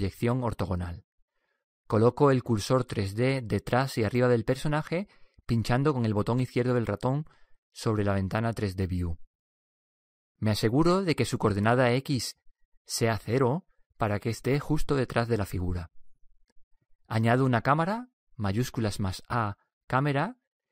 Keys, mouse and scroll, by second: 0.3 KP_3, 3.0-6.0 middle drag, 6.0-8.4 drag, 9.9 n, 11.0-16.6 drag, 16.6 n, 18.1 shift+a.